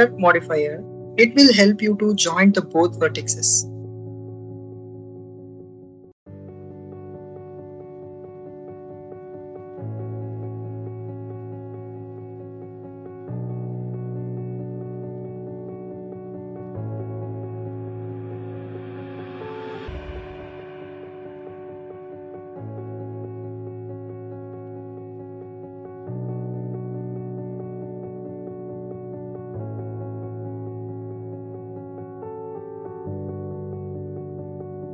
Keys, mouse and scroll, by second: 0.0 click, 0.8 click, 1.5 click, 2.5 click, 3.4 click, 5.4 click, 5.8 click, 7.5 click, 8.5 click, 8.8 s, 9.4 click, 11.3-12.8 drag, 13.0-14.0 drag, 14.3 click, 14.7-15.9 drag, 16.4 click, 17.0 click, 17.8 click, 18.1-19.7 drag, 20.5 click, 21.3 click, 21.7-23.0 drag, 23.3 click, 24.1 click, 24.5 click, 25.7 click, 26.1-27.3 drag, 27.5 click, 28.1-29.2 drag, 29.5 click, 29.7-31.1 drag, 31.4 click, 32.0-33.8 drag, 34.2 click, 34.6-34.9 drag.